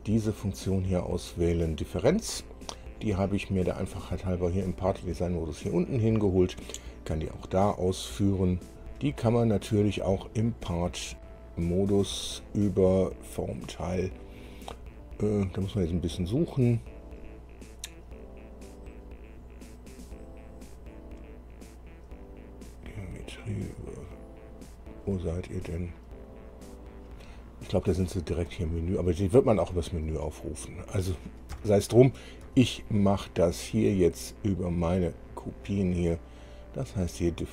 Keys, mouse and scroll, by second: 3.1 click, 4.0 click, 11.1 click, 11.9 click, 13.2 click, 31.7 Escape, 32.6 Escape, 34.2 click, 35.1 click.